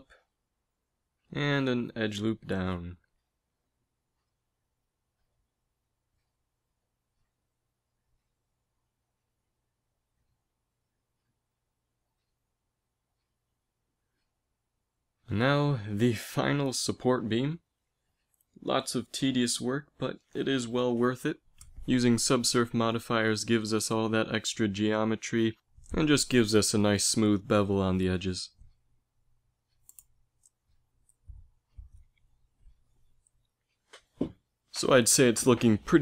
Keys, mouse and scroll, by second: 1.0 ctrl+r, 4.2 z, 6.9 ctrl+r, 9.3-10.4 drag, 9.4 ctrl+z, 16.3 ctrl+r, 18.9 ctrl+r, 21.7 z, 22.7 g, 26.4 z, 27.7 ctrl+r, 31.6 middle click, 32.0 middle click, 33.0 ctrl+r.